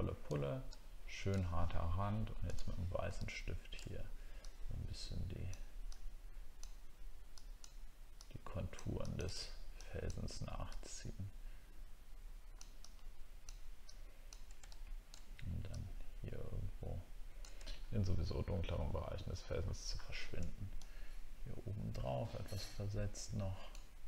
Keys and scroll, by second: 17.7 alt+scroll down 1, 18.9 alt+scroll down 1, 19.2-20.3 alt+scroll up 4.